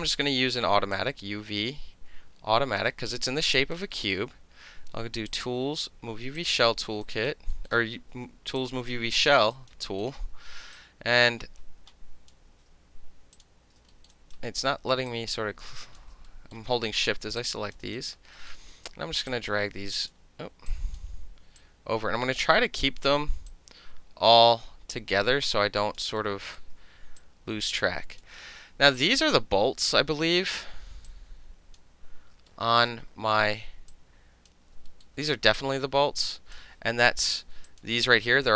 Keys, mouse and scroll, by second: 0.9-2.8 drag, 3.5 alt+right click, 3.9 alt+middle click, 5.3 click, 6.4 click, 7.0 alt+right click, 7.5 alt+middle click, 8.6 click, 9.5 alt+right click, 9.7 alt+middle click, 10.0 alt+middle click, 10.7-12.3 alt+drag, 12.3-13.3 ctrl+alt+middle drag, 12.4 ctrl+z, 13.3 shift+click, 13.9 alt+middle click, 14.1 alt+right click, 15.1 shift+click, 16.3 alt+middle click, 17.4-17.7 shift+drag, 17.7 alt+shift+middle click, 18.0 alt+click, 18.1 alt+middle drag, 18.5-19.3 alt+middle drag, 19.3-20.1 drag, 20.1-20.7 middle drag, 20.7 drag, 21.0-21.6 middle drag, 21.6-23.0 drag, 23.0-23.5 middle drag, 23.5-26.0 drag, 26.0 alt+middle drag, 26.6-27.2 alt+middle drag, 27.2-28.2 drag, 28.2-28.6 middle drag, 28.9-29.9 drag, 30.1 alt+middle click, 31.1-31.7 drag, 32.5 alt+middle click, 33.9-34.5 drag, 34.9 alt+middle click, 35.6-36.5 drag, 37.7 alt+click.